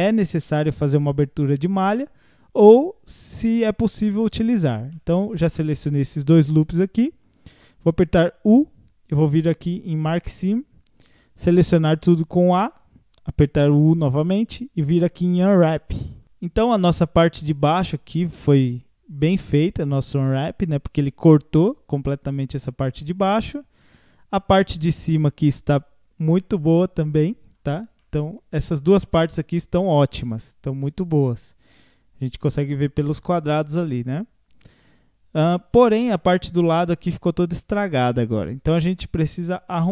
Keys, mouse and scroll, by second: 4.9-7.9 middle drag, 8.2 u, 12.4 a, 13.8 u, 16.2-25.1 middle drag, 27.4 click, 28.0-34.5 middle drag, 38.4 scroll up 4, 39.2-39.9 shift+middle drag.